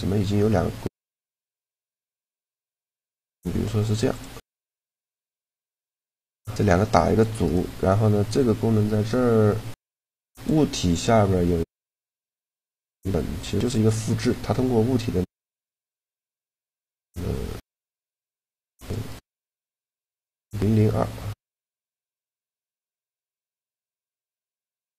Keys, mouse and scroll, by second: 2.0-3.9 right drag, 3.2 shift+d, 4.4-5.9 right drag, 5.7 ctrl+g, 7.2-9.0 right drag, 10.0-11.7 drag, 10.7-12.6 right drag, 12.0-15.2 drag, 15.8-17.7 drag, 18.8-20.6 right drag, 21.5-23.2 right drag, 22.4-24.0 drag, 23.8 right click, 24.1 middle click, 24.4 z.